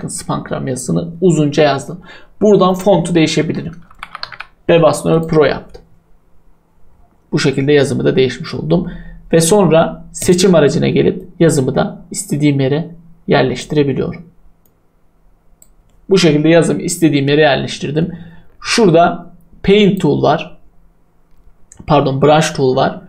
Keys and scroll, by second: 3.4-4.7 typing.